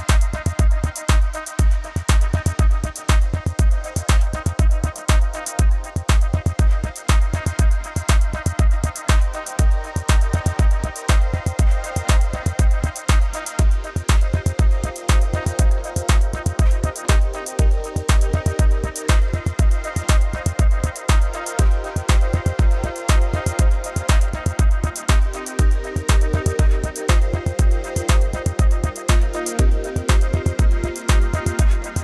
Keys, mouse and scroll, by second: 0.0-0.4 typing, 0.5 click, 3.4 click, 5.0 click, 5.1 v, 5.4 click, 7.6-9.2 typing, 8.4 click, 9.9 click, 11.3-11.9 typing, 12.0 click, 13.7 click, 14.5 click, 15.1 -, 15.4 click, 16.2-18.7 typing, 16.6 click, 17.3 click, 17.5 click, 18.1 click, 18.3 click, 18.9 click, 20.4 click, 20.7 click, 20.9 click, 21.1 a, 21.3 click, 21.5 a, 22.5 click, 22.7 v, 22.9 click, 23.0 space, 23.3 click, 25.5 right click, 26.1 click, 28.2 v, 30.0 click.